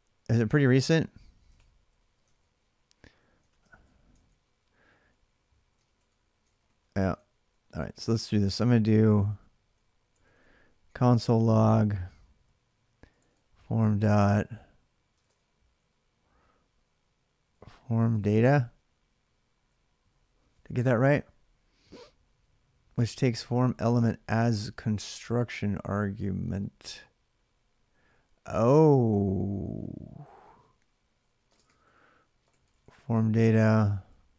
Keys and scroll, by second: 0.7-16.0 typing, 17.2-18.8 typing, 29.6-34.1 typing.